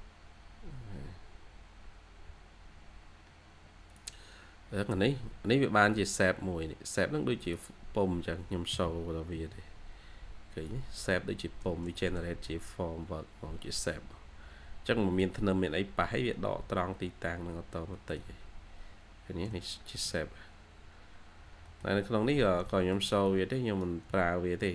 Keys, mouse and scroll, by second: 4.2-4.5 scroll up 1, 7.8 scroll down 1, 8.6-9.2 typing, 9.7 scroll down 1, 10.0 scroll up 1, 10.0 scroll down 1, 10.3 scroll, 10.8-11.1 scroll down 1, 11.2-11.9 typing, 11.5 middle click, 12.1-12.5 shift+scroll down 2, 14.2 scroll down 1, 14.8 middle click, 15.5 scroll up 1, 17.0 scroll down 1, 17.8 middle click, 18.8 scroll up 1, 19.0 scroll down 1, 19.3 middle click, 20.3 scroll up 1, 21.0-21.5 scroll down 1, 21.5 middle click, 22.2 scroll down 1, 22.4 middle click, 24.0 shift+middle click.